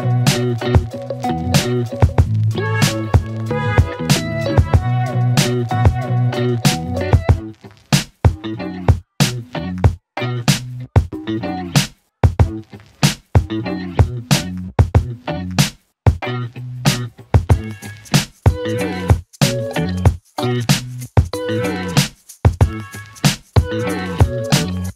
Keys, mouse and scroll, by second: 0.8 ctrl+d, 2.4 click, 4.2 click, 9.6 alt+Num_Lock, 10.5-12.2 alt+click, 15.1 click, 18.3-20.0 click, 23.0-23.7 click.